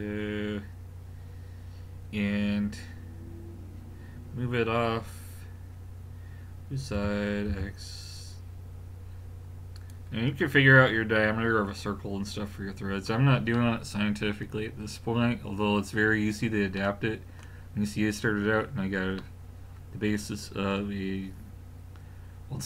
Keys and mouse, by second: 7.0 g, 13.6 middle click, 15.5-16.9 middle drag, 20.0-22.6 middle drag.